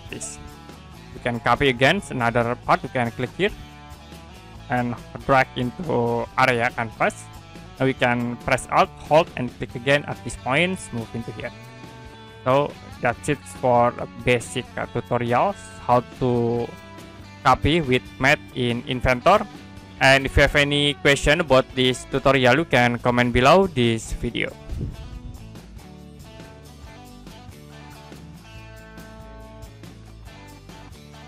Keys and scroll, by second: 25.6 Print.